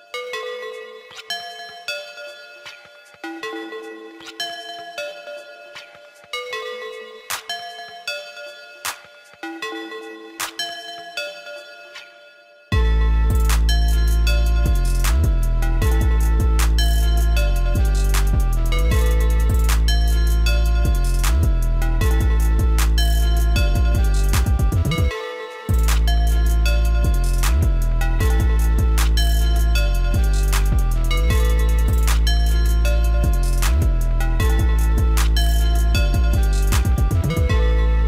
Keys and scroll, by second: 4.9 ctrl+s, 28.0 ctrl+c, 28.4 ctrl+b, 32.2 ctrl+x, 36.0 ctrl+x, 36.7 ctrl+x.